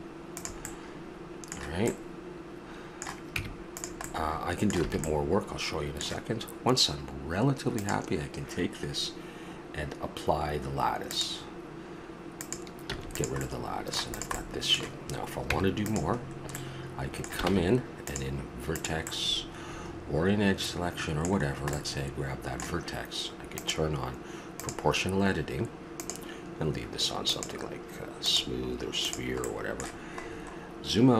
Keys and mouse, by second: 0.7 middle click, 2.2 middle click, 2.3-3.3 middle drag, 3.3 Tab, 4.8 a, 5.9-6.7 middle drag, 7.7 right drag, 11.2-11.7 drag, 12.9 x, 13.4-15.4 middle drag, 15.4 Tab, 17.5 ctrl+Tab, 19.0-20.3 middle drag, 29.4-31.1 middle drag.